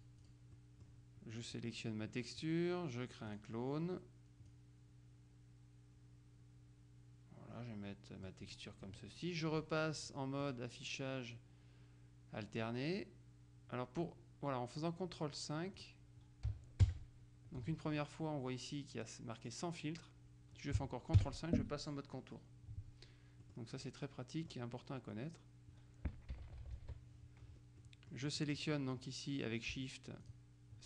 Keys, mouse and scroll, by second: 0.0 click, 1.6 click, 3.4 click, 4.6-8.9 drag, 10.5 click, 15.9 click, 16.9 ctrl+KP_5, 21.3 ctrl+KP_5, 23.5 middle click, 24.0 click, 26.5 Left, 27.9 middle click, 28.6 right click, 30.3 shift+click.